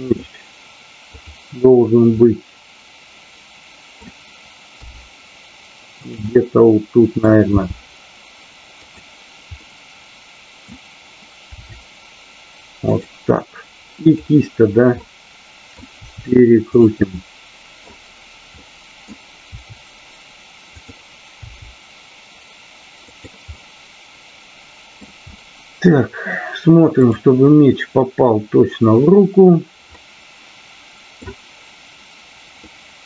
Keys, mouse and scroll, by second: 0.0 click, 1.2-1.7 drag, 2.2-4.1 middle drag, 6.1 click, 6.3 middle click, 8.9 drag, 9.5-10.6 middle drag, 11.6 r, 12.8 click, 13.9 click, 14.9 middle click, 16.0 r, 16.8 click, 17.1 middle click, 18.6 middle click, 19.4 r, 20.7 click, 21.4 g, 23.1 click, 23.4 scroll up 1, 23.6-25.1 middle drag, 25.3-25.7 middle drag, 26.9 drag, 29.9-31.2 middle drag, 32.5 scroll up 1, 32.7-33.0 middle drag.